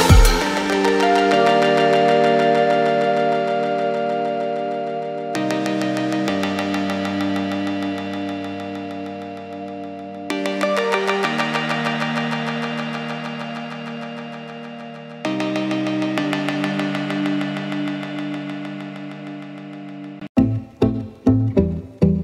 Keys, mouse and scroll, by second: 0.7 click, 8.0 click, 10.9 click, 11.7 click, 13.4 click, 15.9 alt+click, 16.4 click, 17.2 alt+click, 17.7 alt+click, 19.4 click, 21.2 scroll up 1.